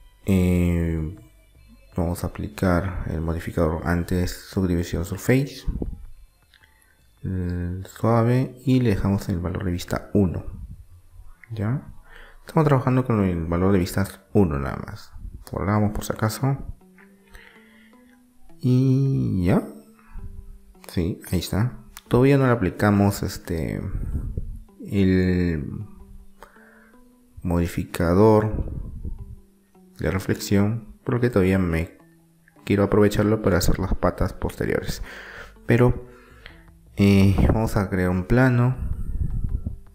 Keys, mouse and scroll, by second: 7.5 click, 8.2-9.2 middle drag, 9.2 Tab, 9.2 click, 11.0 Tab, 15.0 click, 16.4-18.1 middle drag, 18.5-22.8 middle drag, 27.5-30.6 middle drag, 32.1-34.2 drag, 33.5 shift+a, 39.2-39.9 middle drag.